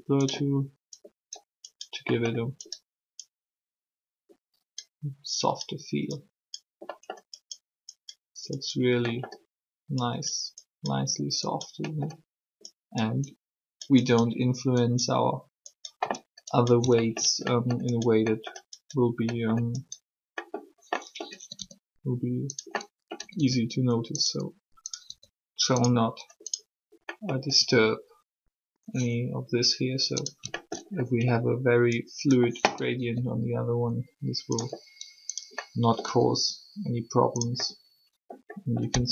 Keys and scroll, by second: 21.4 typing, 23.2 typing, 25.0 r, 27.6 r, 32.9 r, 36.0 r, 38.9 r.